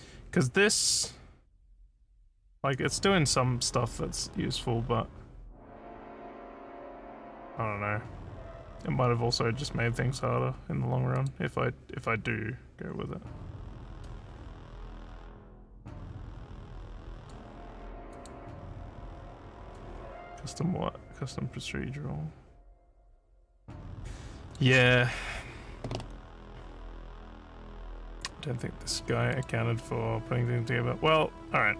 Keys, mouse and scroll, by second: 11.2 click, 14.1-17.4 drag, 18.1 click, 19.8-24.6 drag, 29.3 click.